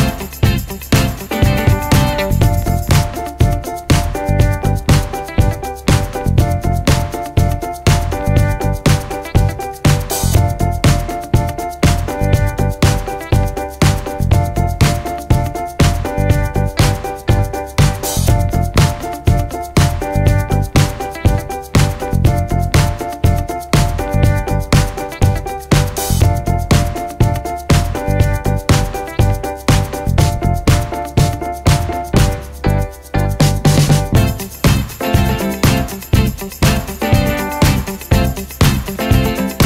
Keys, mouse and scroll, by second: 3.6 scroll down 1, 4.1 click, 4.6 scroll up 1, 5.2-7.8 drag, 7.8 scroll down 1, 8.6 click, 9.0 scroll up 1, 9.7-11.7 drag, 14.7-15.4 scroll down 1, 16.4 scroll up 1, 16.6 ctrl+space, 17.5 click, 18.0-18.5 scroll down 1, 19.0 click, 19.4 scroll up 1, 20.0-23.2 drag, 27.1 ctrl+space, 27.5 click, 28.7 right click, 29.6 click, 34.3 Tab, 35.6 click.